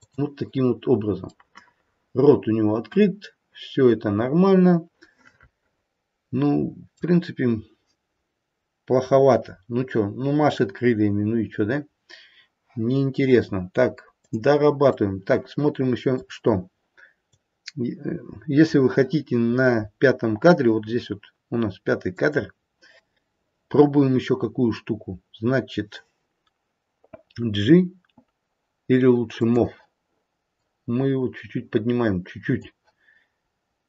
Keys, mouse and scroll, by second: 0.1 click, 1.3 middle click, 1.8 middle click, 3.3 middle click, 3.5 middle click, 3.7 middle click, 4.2 middle click, 14.2 click, 15.0 middle click, 17.9 click, 22.1 click, 29.4 click, 30.4 click, 33.5-33.8 scroll up 1.